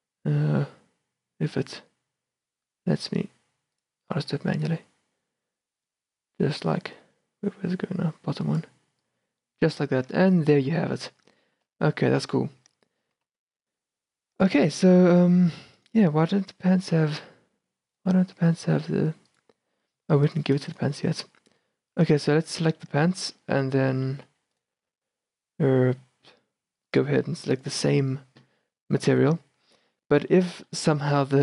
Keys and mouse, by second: 4.7-8.7 drag, 9.2-10.7 drag, 10.7 shift+b, 11.7 shift+b, 13.3 shift+b, 17.5 right click, 17.6 z, 19.5-23.8 right drag, 23.8-26.0 middle drag, 26.0-26.7 right drag, 27.0 right click, 29.1 middle click, 29.8-31.4 middle drag.